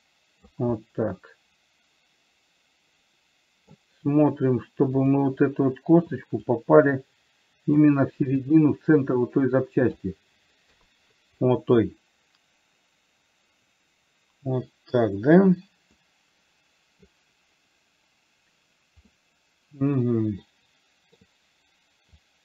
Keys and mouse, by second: 1.1-4.0 middle drag, 5.4 click, 6.8-8.3 drag, 8.8 click, 9.0-10.4 drag, 11.0 KP_3, 16.3-17.4 middle drag, 19.4-21.6 middle drag.